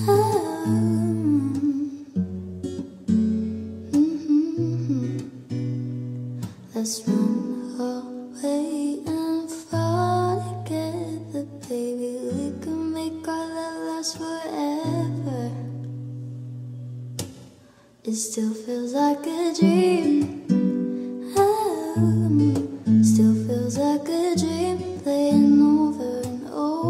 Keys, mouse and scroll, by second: 7.3 click.